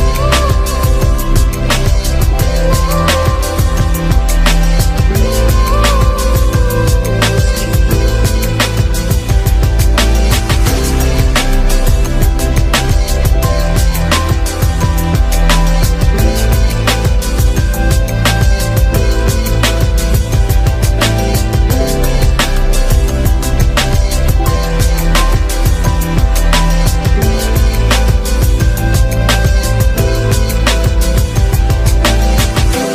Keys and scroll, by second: 30.9 ctrl+t.